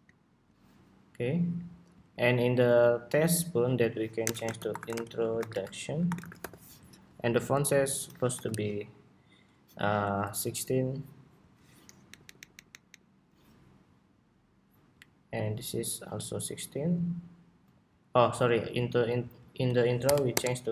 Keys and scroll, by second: 6.3 Escape, 12.0 alt+Up, 12.8 alt+Up.